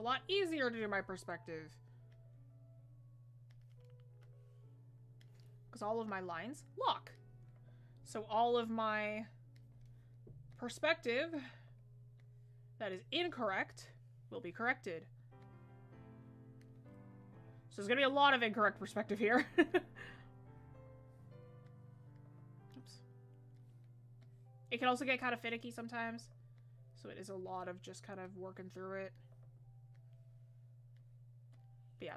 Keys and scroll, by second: 26.2 ctrl+z.